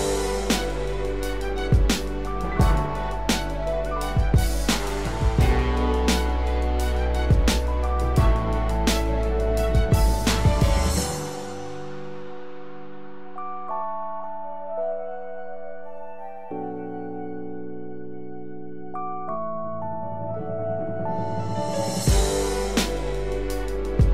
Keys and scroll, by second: 3.6 ctrl+-, 6.4 ctrl+0, 11.1 ctrl+-, 11.7 ctrl+=, 15.4 ctrl+0, 16.0 ctrl+0.